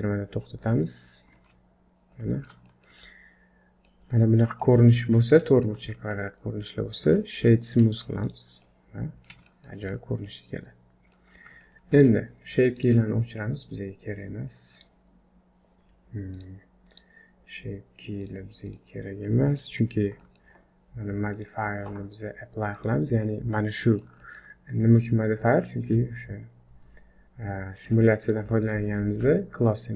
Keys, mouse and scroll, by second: 1.4 space, 2.1 middle click, 2.7 shift+middle click, 3.0 middle click, 4.1-4.5 scroll up 4, 4.6 middle click, 6.0 shift+middle click, 6.4-7.1 scroll down 3, 6.7 middle click, 7.2 shift+middle click, 8.7 middle click, 9.5 shift+middle click, 9.8-10.7 scroll up 5, 10.3 middle click, 11.4 scroll down 4, 11.6 shift+middle click, 12.1 scroll down 1, 12.8 click, 14.7 click, 16.9 click, 18.2 click, 19.3 middle click, 19.8-20.2 scroll up 2, 20.2 shift+middle click, 21.3 click, 22.8 click, 23.7 middle click, 24.2 shift+middle click, 27.8 click, 28.3 click, 29.2-29.9 scroll up 4.